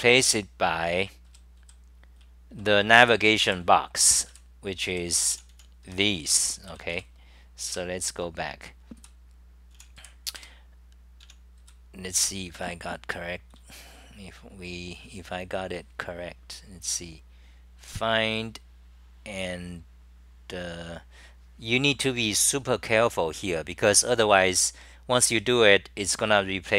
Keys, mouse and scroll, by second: 6.4 e.